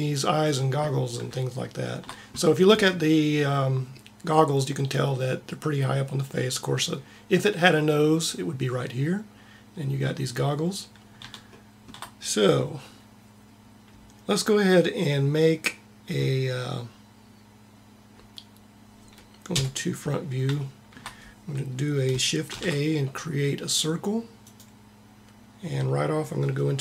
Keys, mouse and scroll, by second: 19.4 KP_1, 22.4 shift+a, 24.4 shift+a.